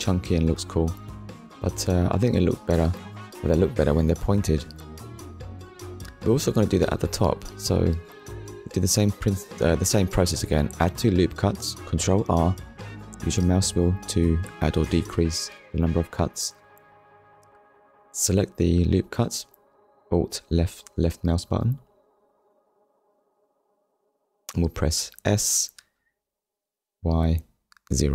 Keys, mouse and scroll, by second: 0.2 click, 1.1 ctrl+s, 1.6 middle click, 3.9 click, 4.5 middle click, 5.6 Tab, 6.1 middle click, 8.5 middle click, 10.0 ctrl+r, 10.8-11.2 scroll up 1, 11.4 click, 12.3 right click, 13.1 middle click, 15.5 click, 15.9 middle click, 18.9 alt+click, 21.6 click, 22.2 middle click, 24.5 middle click, 26.9 0, 27.7 Return.